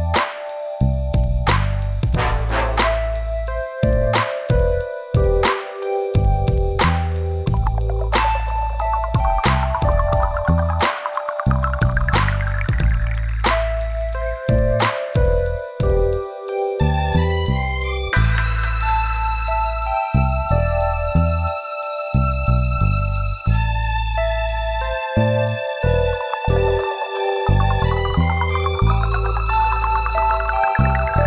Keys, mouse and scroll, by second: 0.2 click, 1.7 click, 2.2 Return, 4.1 scroll down 2, 4.1 t, 6.0-6.3 scroll up 2, 7.3 middle click, 8.4 click, 8.6 click, 9.1 scroll down 1, 9.8 scroll up 1, 10.9 click, 11.0 click, 12.8 scroll up 2, 13.9 click, 15.1 scroll down 2, 16.5 scroll up 2, 17.5 click, 18.0 double click, 20.0 click, 20.1 click, 20.8 click, 21.1 click, 21.4 click, 21.5 double click, 21.9 double click, 22.1 double click, 22.8 Return, 23.9 t, 24.5 scroll down 2, 25.6 scroll up 2, 26.5 click, 27.5 scroll down 1, 28.1 click, 28.5-29.3 scroll up 1, 29.9 click.